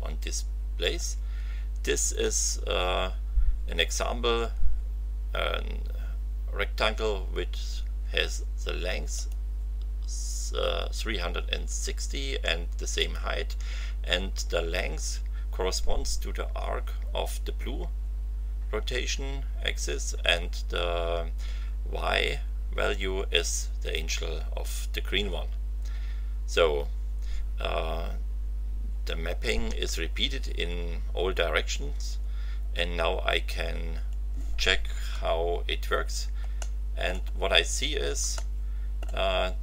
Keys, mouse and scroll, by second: 9.1 click, 12.9 click, 33.6 scroll up 2, 36.6 shift+middle click, 37.3-38.1 shift+scroll up 5, 38.3 shift+middle click, 39.5 scroll up 2.